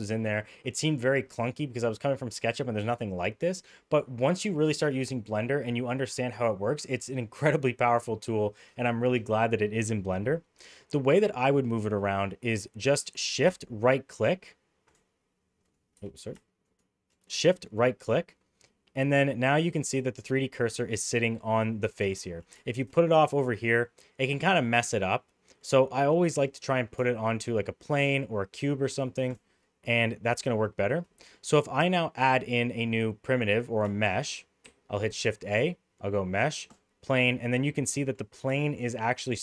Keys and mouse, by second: 15.0 shift+right click, 16.6 shift+right click, 18.8-20.4 middle drag, 21.7 middle click, 22.2 shift+middle drag, 22.8 shift+right click, 23.1-25.6 middle drag, 26.1 middle click, 29.3 shift+right click, 29.9 middle click, 31.1 middle drag, 34.6 shift+a, 37.4-38.1 middle drag, 39.3-39.4 middle drag.